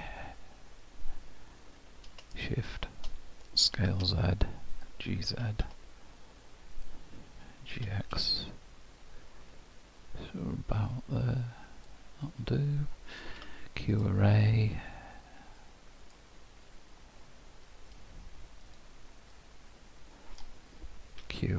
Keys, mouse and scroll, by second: 3.8 s, 5.3 g, 7.8 g, 13.4 q, 19.3 middle click, 21.2 q.